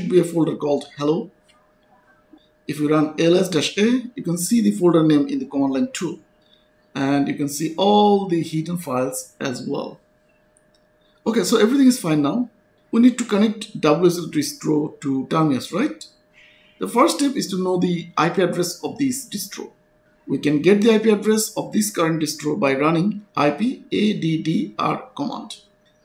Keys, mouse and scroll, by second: 1.8 click, 2.4-3.3 typing, 5.1 click, 8.2 s, 8.7 space, 9.2 a, 9.6 Return, 13.1 click, 20.3 click, 23.8-25.1 typing, 25.2 Return.